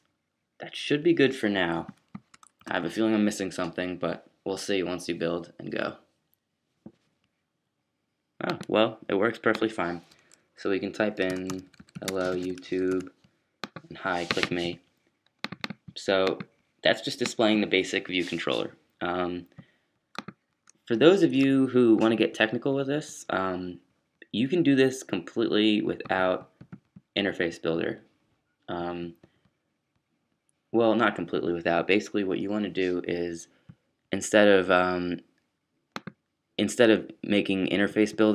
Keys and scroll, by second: 11.3-12.9 typing, 21.2 super+q.